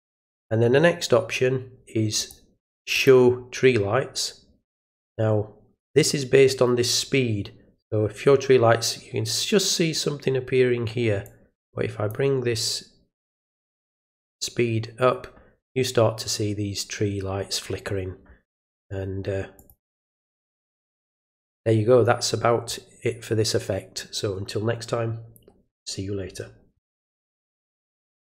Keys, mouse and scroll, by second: 2.2 click, 2.9 click, 11.2-12.1 drag, 13.8 click, 19.5 click, 20.0 click, 28.2 click.